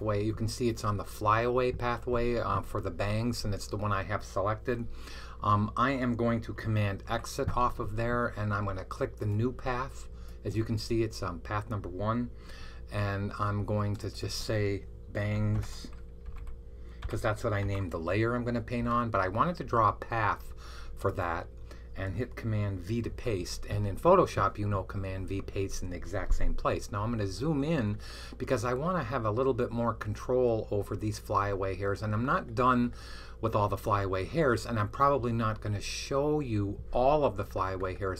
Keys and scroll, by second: 6.9 super+x, 15.4-17.5 typing, 22.9 super+v.